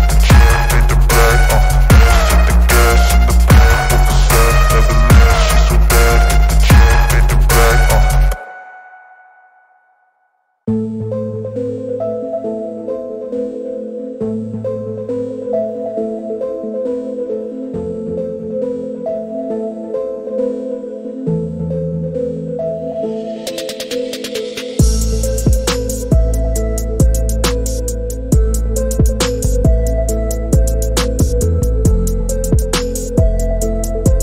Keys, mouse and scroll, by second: 0.6 right click, 1.0-1.8 middle drag, 2.8-3.6 middle drag, 5.1-6.2 right drag, 7.4 g, 8.2 y, 9.6-10.2 drag, 10.2 click, 10.6-12.7 middle drag, 15.3-18.5 drag, 20.8 click, 23.4 click, 25.6 click, 27.1 click, 31.0 click, 33.4-34.2 drag.